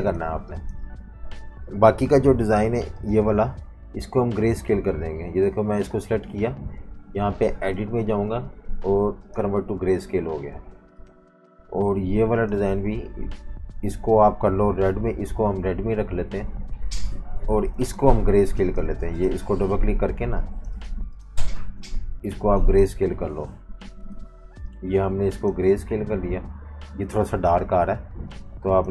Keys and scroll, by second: 0.0-0.4 typing, 2.5 i.